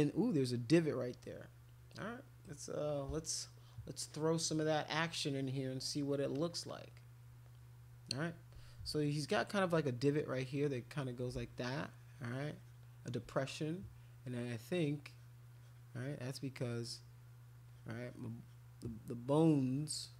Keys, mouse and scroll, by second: 1.2-2.4 right drag, 6.3 click, 6.7 click, 10.4 alt+click, 10.7 alt+click, 11.5 shift+click, 11.7-12.7 shift+drag, 14.7 click, 15.1 click, 15.5 click, 15.9 click, 16.3 click, 16.6 click, 16.8 click, 17.6 click, 18.0 click, 18.4 click, 19.7 click.